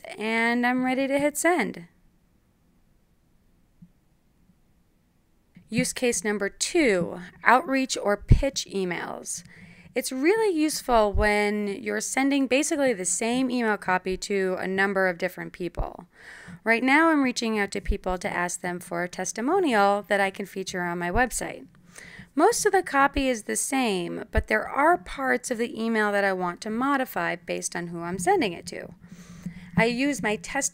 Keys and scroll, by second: 0.0-0.4 typing, 6.1-8.1 typing, 10.4-16.8 typing, 16.8 Return, 20.1-23.9 typing.